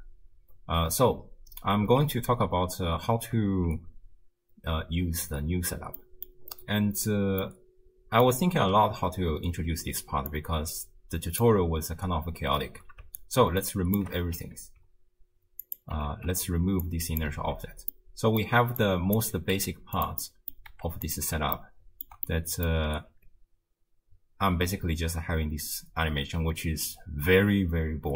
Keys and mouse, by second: 0.4 space, 1.9 shift+space, 3.2 space, 6.1 click, 7.4 middle click, 10.3-11.5 drag, 13.7-14.1 shift+drag, 14.7 ctrl+x, 15.7 click, 16.1 ctrl+x, 16.8 drag, 17.1 click, 17.4 ctrl+x, 18.0 middle click, 18.8 click, 19.5 g, 20.3 click, 20.7 g, 21.6 ctrl+click, 22.3 click, 23.1 space, 24.7 shift+space, 26.4 shift+space, 27.4 space.